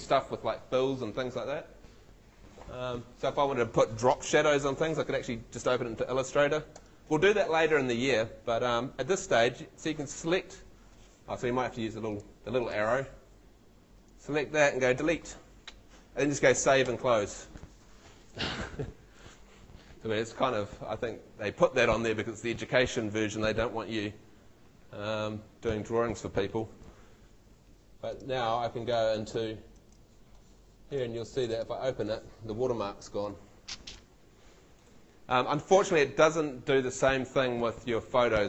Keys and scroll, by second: 14.9 BackSpace, 16.5 super+s, 16.9 super+w, 29.4 super+Tab.